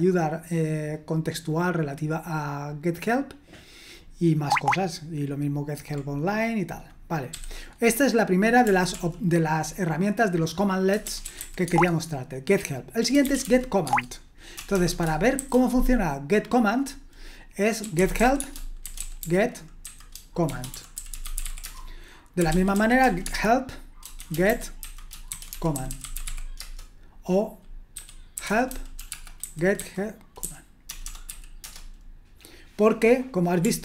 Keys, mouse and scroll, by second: 3.8-4.5 scroll down 1, 4.5-5.5 scroll down 1, 7.3 q, 8.9 ctrl+l, 10.8-11.9 typing, 13.0-15.4 typing, 17.6-31.3 typing, 31.6 Return.